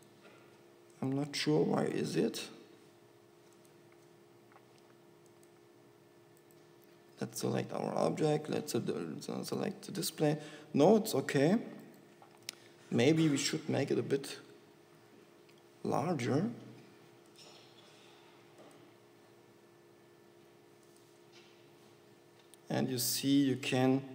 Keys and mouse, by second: 12.7 s, 15.5 g, 18.2 g, 20.4 g, 22.8 g.